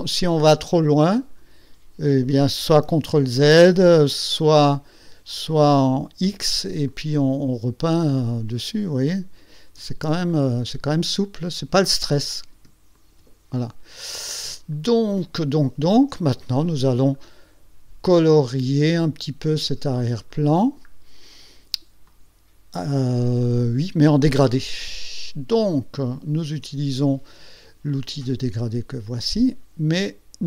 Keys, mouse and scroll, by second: 0.8 click, 3.2 ctrl+z, 4.8-5.8 drag, 6.4 x, 7.0-10.1 drag, 10.4-10.7 ctrl+scroll up 2, 11.1 ctrl+click, 12.3 click, 13.1 shift+click, 13.9-14.3 ctrl+scroll down 2, 14.8 ctrl+click, 15.7 ctrl+scroll down 2, 16.7 click, 19.6 ctrl+scroll down 2, 20.4 ctrl+click, 22.2 click, 29.2 click.